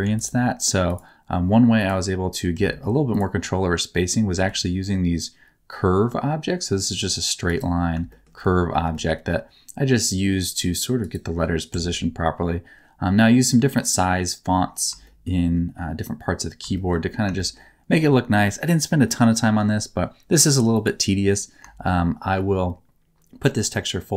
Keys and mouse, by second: 0.0 x, 0.8 click, 1.8 click, 2.5 Tab, 3.1 middle click, 4.3 g, 8.1 shift+middle click, 8.8 g, 11.0 middle click, 11.7 Tab, 15.0 shift+middle click, 16.7 shift+middle click, 17.3 shift+middle click, 21.8 shift+middle click.